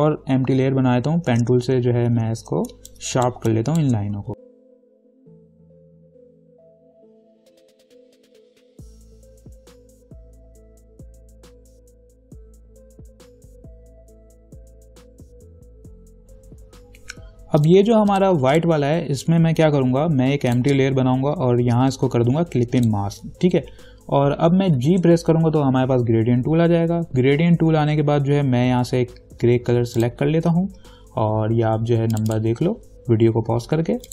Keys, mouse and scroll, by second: 1.5 p, 2.0 ctrl+=, 2.3 ctrl+=, 2.9-4.9 typing, 3.1 click, 3.7 click, 4.3 ctrl+=, 4.4 click, 4.5 ctrl+=, 4.8 click, 4.9 click, 5.0 click, 5.1 ctrl+click, 5.5-7.3 ctrl+drag, 7.4 right click, 7.5 click, 8.1 right click, 8.2 click, 8.5 Up, 8.6 v, 8.7 Up, 8.9 ctrl+-, 9.1 Down, 9.2 ctrl+-, 9.3 space, 9.5 shift+click, 9.7 ctrl+z, 10.0 ctrl+-, 10.1 space, 10.1 click, 10.1 space, 10.3 ctrl+j, 10.4 ctrl+t, 10.5 right click, 10.6 click, 10.7 shift+click, 11.2 ctrl+=, 11.3 space, 11.4 click, 11.4 space, 11.5 ctrl+=, 11.6 space, 11.6 click, 11.6 space, 11.7 shift+click, 12.3 ctrl+t, 12.4 shift+click, 12.8 ctrl+=, 12.9 click, 13.0 space, 13.1 shift+click, 13.5 shift+click, 14.0 ctrl+-, 14.1 space, 14.5 ctrl+=, 14.5 space, 14.6 click, 14.8 ctrl+t, 14.9 shift+click, 15.3 Down, 15.5 ctrl+-, 15.6 Down, 15.7 Up, 15.8 ctrl+-, 15.9 ctrl+0, 16.0 click, 17.8 click, 23.1 alt+click, 25.3 g, 30.2 click.